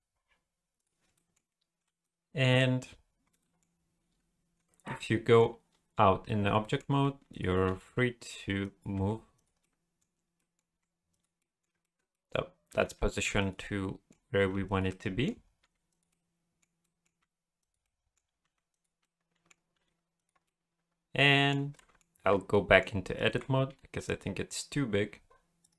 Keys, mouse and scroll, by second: 0.8 click, 1.1 shift+middle click, 2.0 middle click, 3.4 middle click, 4.5 Tab, 4.8 middle click, 5.7 scroll up 1, 6.6 middle click, 6.9 g, 7.7 r, 8.9 g, 9.6 middle click, 10.4 middle click, 10.7 g, 11.4 middle click, 11.8 shift+middle click, 12.1 middle click, 12.7 r, 13.6 middle click, 14.4 g, 14.9 middle click, 15.6 g, 16.1 middle click, 16.8 middle click, 17.2 g, 17.8 middle click, 18.4 g, 19.0 middle click, 19.7 r, 20.4 middle click, 21.8 middle click, 22.1 Tab, 22.5 middle click, 22.9-23.2 scroll up 2, 23.2 a, 23.7 s.